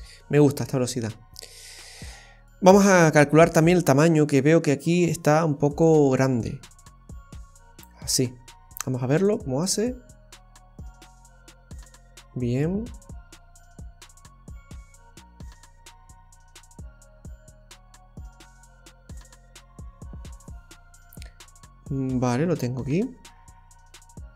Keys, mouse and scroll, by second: 0.6-1.1 scroll down 2, 1.1 middle click, 2.7-4.4 scroll down 14, 4.4-4.9 scroll down 1, 5.8 click, 8.1-9.0 scroll up 3.